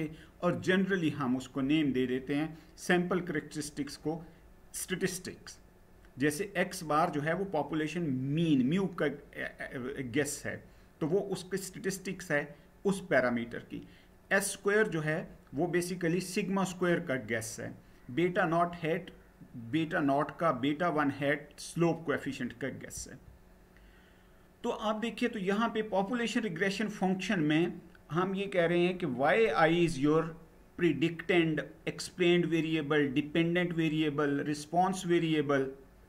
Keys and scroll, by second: 22.6 Down.